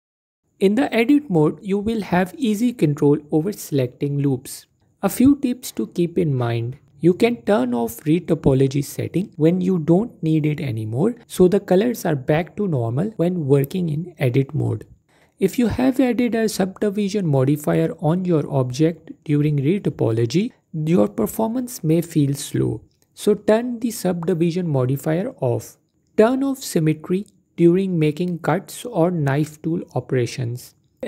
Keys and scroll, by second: 0.6 Tab, 3.6-4.3 typing, 15.5 Tab, 20.2 typing, 25.4 typing.